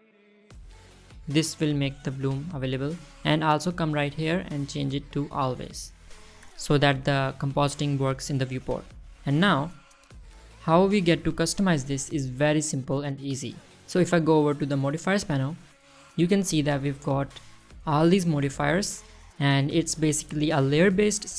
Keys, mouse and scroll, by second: 0.8-1.4 middle drag, 1.5-3.1 scroll up 1, 4.8-6.2 drag, 6.8-8.1 scroll down 1, 8.1 middle click, 8.7 middle drag, 9.9 click, 11.0 click, 11.6 click, 11.7 click, 15.9 click, 17.8 click.